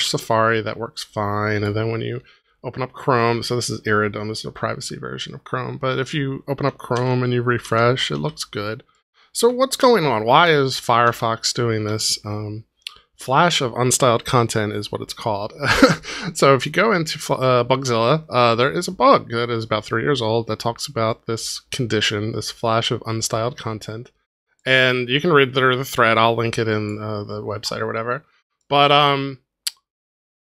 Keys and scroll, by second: 6.9 super+r, 9.8 super+r.